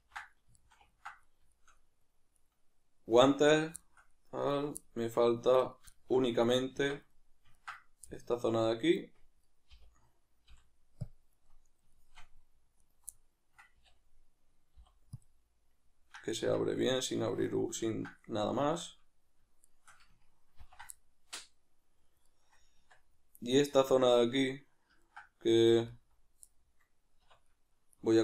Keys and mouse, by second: 0.0 ctrl+j, 2.4 right drag, 3.5 right click, 3.8-4.5 shift+middle drag, 4.5 right click, 4.8-5.6 middle drag, 5.6-5.9 right drag, 5.9-9.4 shift+middle drag, 6.7 Tab, 9.4 right click, 11.4-12.8 middle drag, 12.8-13.1 alt+right drag, 13.1-19.7 middle drag, 13.7 a, 16.5 Tab, 19.7 shift+right click, 20.6 ctrl+j, 21.0-22.3 middle drag, 22.3-22.7 right drag, 22.7 Tab, 23.1-28.2 middle drag, 27.2 \.